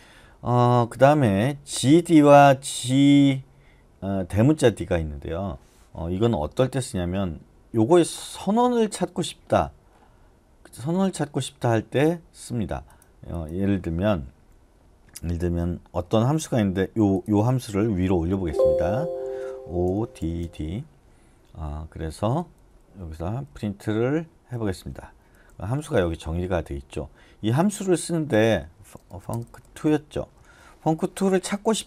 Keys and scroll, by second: 18.3 Escape, 18.7-23.5 typing, 24.5-30.8 typing, 30.4 Escape.